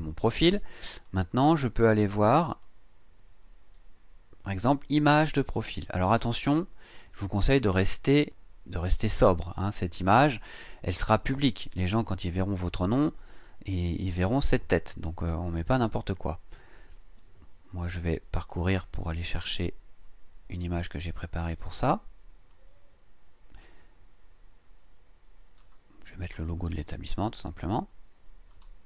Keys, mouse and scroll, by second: 1.0 click, 2.5 click, 4.6 click, 18.5 click, 20.5 click, 22.5-25.8 drag, 26.4 click, 28.5 click.